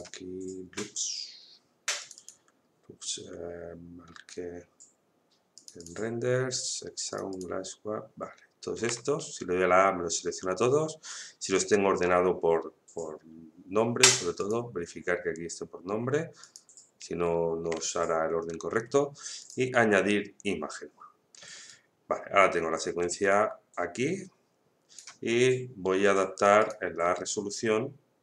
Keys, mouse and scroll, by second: 1.4-2.0 scroll down 1, 2.0 click, 5.5 click, 8.8 a, 14.4 click, 19.4 click, 21.7-26.6 drag.